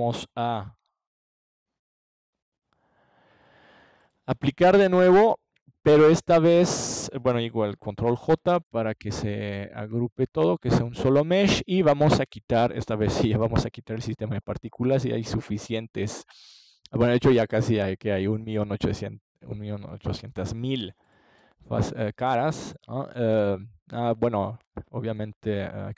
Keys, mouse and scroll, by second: 1.0-2.7 middle drag, 6.2 middle click, 12.5-14.9 drag, 16.4-19.2 drag, 18.1 ctrl+s, 22.9-24.0 middle drag, 24.0-25.2 drag, 25.8 ctrl+s.